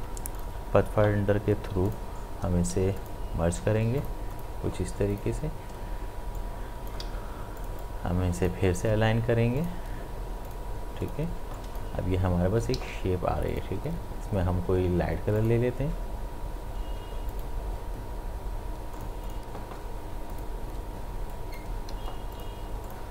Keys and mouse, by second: 0.4 click, 2.7 ctrl+z, 3.0 click, 5.1 click, 7.0 ctrl+z, 7.6-9.6 drag, 12.8 ctrl+z, 13.5 click, 21.9 ctrl+z, 22.3 click, 22.6 ctrl+space, 22.9 ctrl+click.